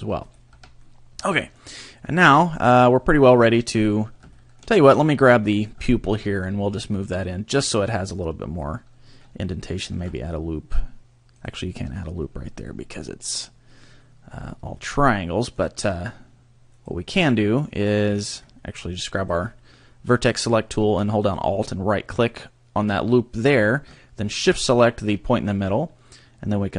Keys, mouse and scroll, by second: 0.5 a, 0.8 middle click, 2.6 right click, 3.7 scroll up 3, 4.3 shift+middle click, 5.0 right click, 5.3 middle click, 6.0 shift+middle click, 6.2 scroll up 2, 6.9 click, 9.9 ctrl+r, 11.4 right click, 13.0 middle click, 14.8 middle click, 16.7 click, 19.2 click, 21.3 alt+right click, 24.3 shift+right click.